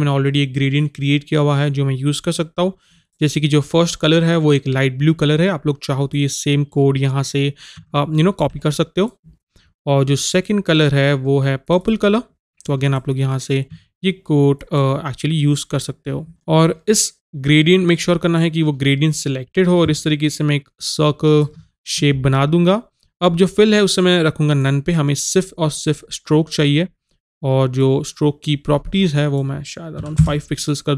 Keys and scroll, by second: 13.8 Tab, 30.1 KP_5, 30.2 Return.